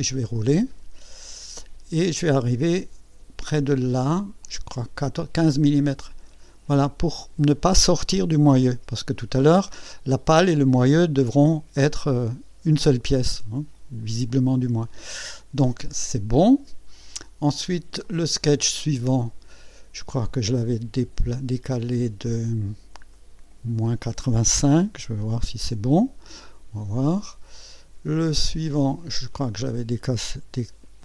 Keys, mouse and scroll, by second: 0.0-2.1 scroll down 11, 4.2 scroll up 2, 6.1 scroll down 2, 7.0-7.6 scroll up 2, 18.0 click, 19.2-19.7 scroll down 2, 23.1 click, 24.7 KP_Subtract, 25.2 KP_8, 25.4 KP_5, 28.2 click, 29.3 click.